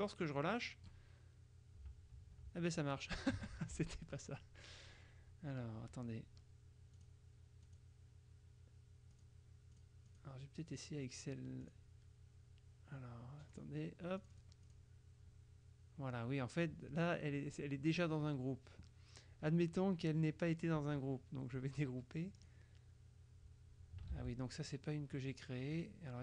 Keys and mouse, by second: 3.6 ctrl+z, 7.0 click, 7.7 click, 9.2 click, 9.9 click, 11.7 click, 13.6 click, 14.3 click, 22.5 click, 24.2 ctrl+z, 24.9-26.2 drag.